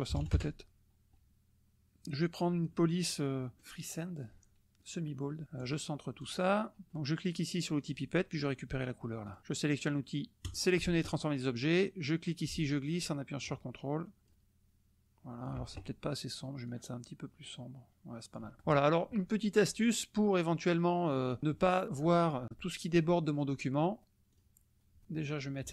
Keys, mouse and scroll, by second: 0.1 KP_6, 0.3 KP_Enter, 2.4 click, 3.6 click, 4.9 click, 5.6 click, 6.2 click, 7.8 click, 9.2 click, 10.5 click, 12.1-15.6 drag, 16.7-18.5 drag, 18.6 drag, 24.3 click, 25.6-25.7 drag.